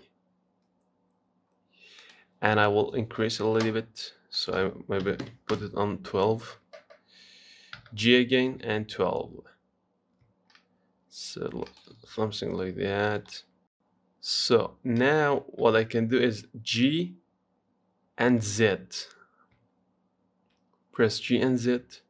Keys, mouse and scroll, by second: 4.6-7.8 drag, 8.0 g, 11.1 s, 13.2 click, 15.9 g.